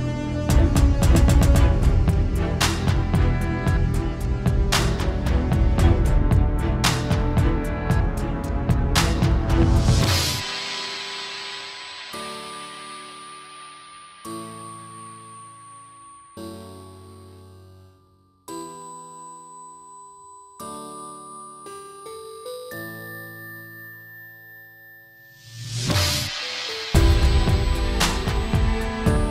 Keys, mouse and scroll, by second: 0.0 click, 0.3 click, 3.9 alt+a, 3.9 scroll down 1, 4.3 alt+h, 4.6 scroll down 3, 4.7 alt+a, 4.8 scroll up 4, 5.0 shift+middle click, 5.1-5.6 scroll down 3, 5.5-5.8 scroll up 3, 5.6 shift+middle click, 5.8 shift+middle click, 6.3 click, 6.6 click, 7.1 r, 8.2 scroll down 2, 8.3 r, 9.6-10.1 scroll down 4, 9.7 middle click, 10.1 shift+middle click, 10.3 r, 13.9 alt+a, 13.9-14.5 scroll up 4, 14.0 middle click, 14.5 click, 15.1 alt+d, 17.5 click, 17.9 s, 18.7 alt+a, 18.7-19.3 scroll down 7, 19.0 shift+middle click, 19.2 shift+middle click, 19.3-19.7 scroll up 4, 19.5 click, 19.7 click, 20.0 middle click, 20.6 alt+g, 20.8 shift+middle click, 20.9-21.3 scroll up 4, 21.0 middle click, 21.3 click, 22.1 r, 23.0 s, 23.1 shift+middle click, 23.2 scroll up 2, 23.3 middle click, 23.4 scroll down 2, 23.6 click, 24.6 click, 25.4 middle click, 25.6 scroll up 3, 25.7 middle click, 25.9 s, 26.3 click, 27.2 click, 28.3 click, 28.8 middle click, 29.0 scroll down 3, 29.0 shift+middle click, 29.1-29.3 scroll up 2.